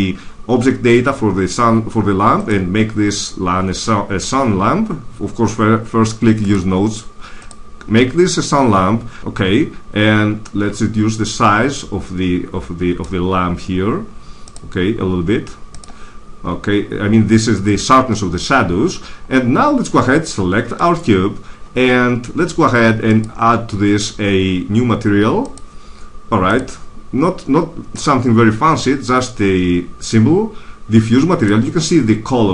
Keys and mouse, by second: 2.3-4.1 drag, 6.3-9.1 drag, 10.3-12.3 drag, 14.3-17.5 drag, 20.7-22.3 right drag, 22.3 click, 23.0-24.9 drag, 25.4-28.2 drag.